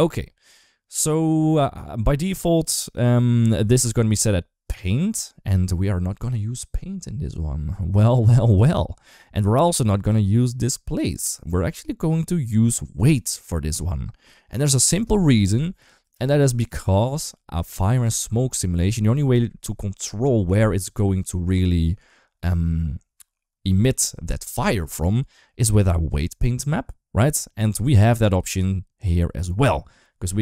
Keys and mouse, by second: 2.1 click, 9.9-21.1 drag.